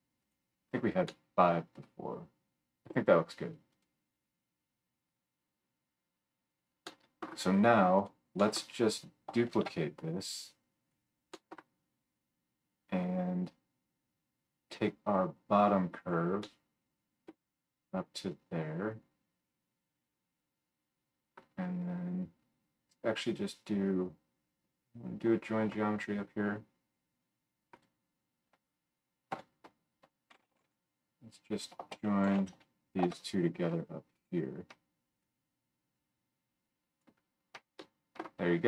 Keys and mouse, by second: 9.6 shift+d, 11.5-16.4 right drag, 14.8-16.4 drag, 14.8-27.8 middle drag, 16.6 click, 16.6 right click, 17.0-20.2 drag, 17.0-20.2 right drag, 27.8-35.2 drag, 29.3 F3, 35.2-38.6 middle drag.